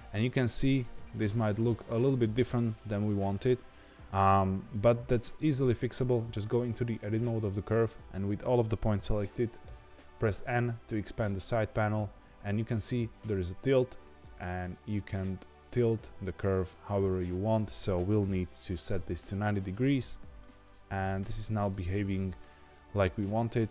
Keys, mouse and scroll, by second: 0.1-3.1 middle drag, 3.4-3.8 scroll up 1, 3.8-5.1 shift+middle drag, 5.1-6.4 scroll down 1, 6.4 Tab, 9.6 n, 14.6-20.4 drag, 20.4-23.4 middle drag.